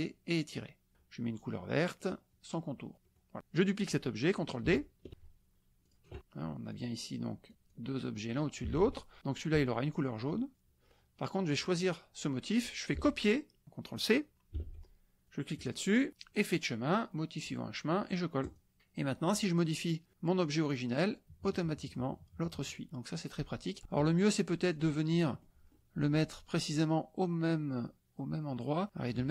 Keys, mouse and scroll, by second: 2.1 click, 3.0 click, 5.8 drag, 6.7-7.2 drag, 7.7-8.7 drag, 8.7 ctrl+z, 10.5 click, 11.5 click, 14.5 ctrl+c, 15.2 click, 16.3 click, 18.4 click, 19.3 click, 20.1-21.2 drag, 21.9 click, 23.1 click, 23.8 ctrl+z, 24.7 click, 25.1 click, 25.7 click, 26.5-27.9 drag, 27.9-29.3 scroll up 9.